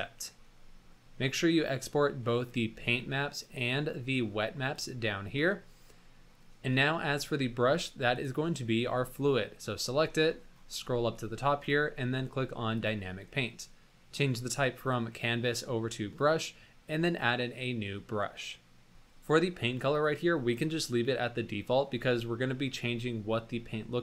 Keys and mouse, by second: 0.0 drag, 4.7 click, 8.1 click, 11.6 click, 12.7 click, 14.8-16.7 drag, 17.7-24.0 drag.